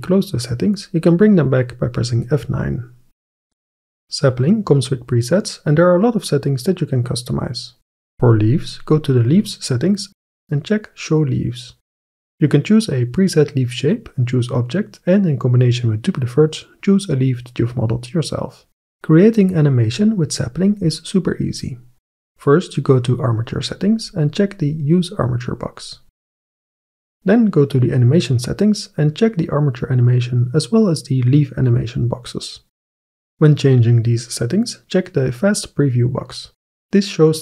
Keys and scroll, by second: 2.2 F9, 7.0 F9.